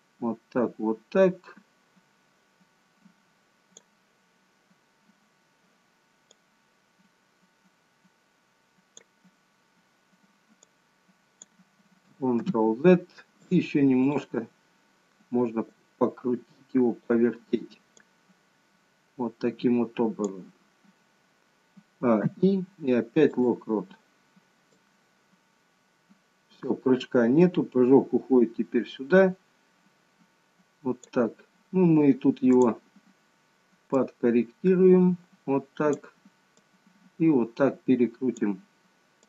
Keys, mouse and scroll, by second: 6.6 click, 10.8 click, 12.5 ctrl+z, 13.5 click, 14.1 click, 15.8 click, 18.2 click, 21.8 a, 22.3 i, 24.9 click, 32.6 click, 34.0 click, 36.7 click.